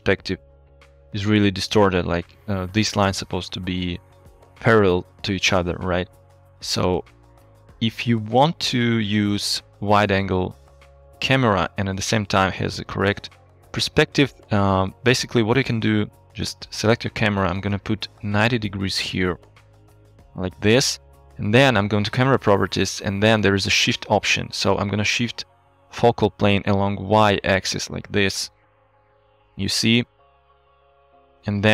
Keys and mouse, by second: 0.5 click, 2.5 click, 7.0-9.6 ctrl+drag, 15.6 n, 17.6-19.5 drag, 20.9 n, 27.3-28.7 shift+drag, 28.7-31.7 shift+middle drag.